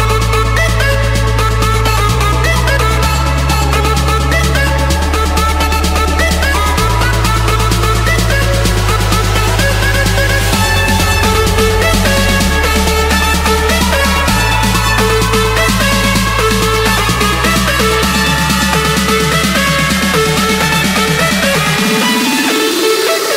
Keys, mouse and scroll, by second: 1.0 Escape, 2.1-3.5 typing, 4.5 Return, 6.0-7.2 drag, 8.2-8.6 typing, 9.4 Return, 10.6 Escape, 11.8-12.9 drag, 22.4 click, 23.2 scroll.